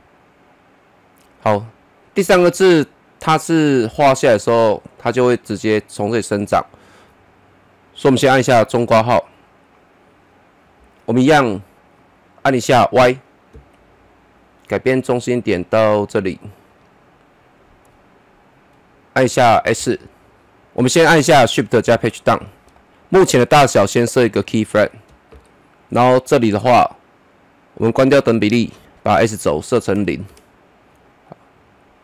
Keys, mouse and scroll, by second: 8.8 [, 11.5-12.4 scroll up 1, 13.5 y, 14.6-19.8 drag, 19.8 s, 20.6 shift+Page_Up, 23.9 click, 24.0 click, 25.3 shift+Page_Up, 27.9 click, 29.9 KP_0, 30.2 Return.